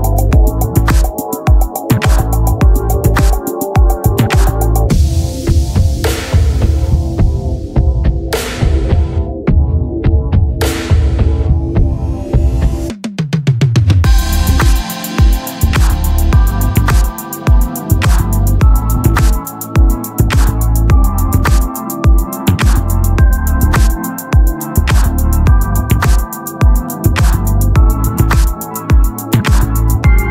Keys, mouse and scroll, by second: 2.8-4.3 right drag, 3.5 c, 4.3-5.6 drag, 4.3 shift+d, 11.5-14.2 middle drag, 12.1 Tab, 14.5-21.8 drag, 27.5 shift+s, 28.5 shift+a.